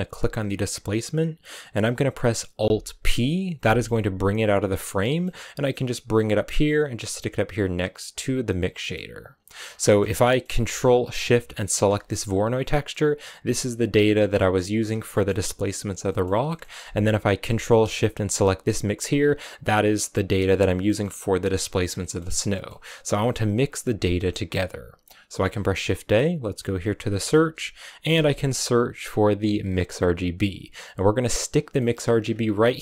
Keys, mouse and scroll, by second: 2.9 alt+p, 4.1 click, 4.8 middle click, 5.1-5.6 scroll up 1, 5.7-8.6 drag, 8.6 middle click, 9.2 click, 9.5-10.1 scroll down 2, 9.7 middle click, 10.1-11.7 middle drag, 11.7 ctrl+shift+click, 12.5-16.5 middle drag, 16.5-17.3 scroll up 3, 18.2 ctrl+shift+click, 20.7-21.7 middle drag, 21.7 scroll down 1, 21.8 middle click, 22.1 scroll up 1, 22.4-24.1 middle drag, 24.1-24.9 scroll up 2, 25.2 shift+a, 31.7 middle click, 31.9-32.4 scroll up 7, 32.5-32.8 drag.